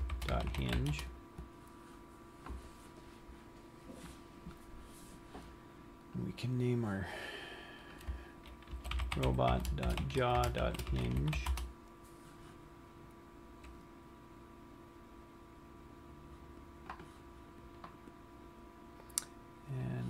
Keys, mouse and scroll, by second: 4.4-6.6 scroll down 1, 6.6 click, 8.2 click, 13.4 scroll down 1, 14.7-16.0 scroll up 4, 16.0-16.5 scroll up 1.